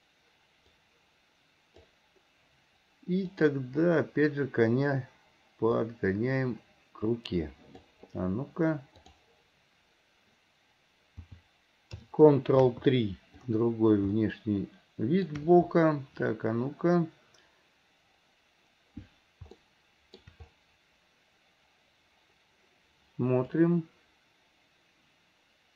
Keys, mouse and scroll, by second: 0.8-2.0 drag, 3.4 click, 5.8-7.9 drag, 9.1-13.6 drag, 14.2-18.2 shift+middle drag, 19.6-20.4 shift+middle drag, 23.7-25.7 drag.